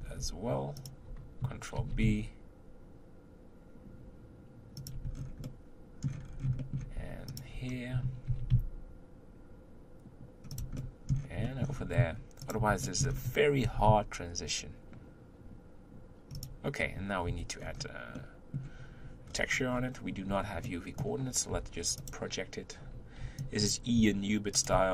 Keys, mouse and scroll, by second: 0.0 scroll up 3, 0.8 alt+click, 1.7 ctrl+b, 5.1-5.4 scroll down 3, 5.4 middle click, 6.2-6.6 scroll up 3, 6.6 shift+middle click, 7.3 alt+click, 8.2 ctrl+b, 10.8-11.8 middle drag, 11.8-12.4 scroll up 2, 12.4 alt+click, 12.8 shift+middle click, 13.1-13.6 scroll up 1, 13.6 ctrl+b, 17.2 3, 17.6-18.2 scroll down 4, 18.2-19.2 middle drag, 19.2-20.3 scroll down 7, 20.3-20.6 scroll up 1, 20.6 middle click, 21.5 u, 23.2 b, 24.7 g.